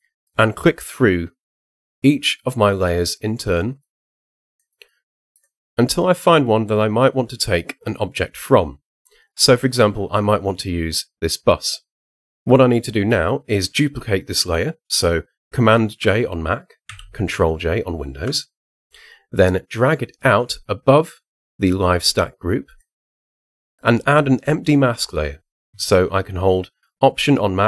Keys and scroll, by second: 16.9 super+j.